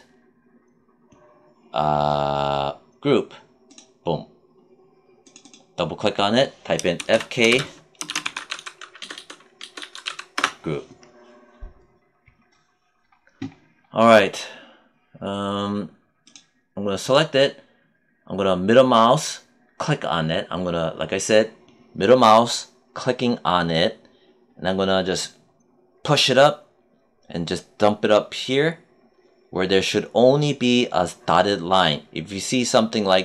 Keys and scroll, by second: 6.6-9.7 typing, 10.3 Return.